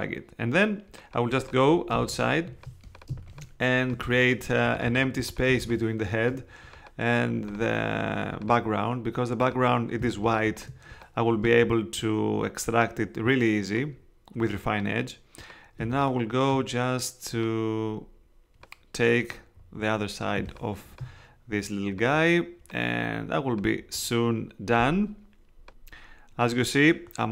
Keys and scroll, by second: 1.9 space, 3.1 space, 5.5 space, 10.0 space, 15.8 space, 20.3 space.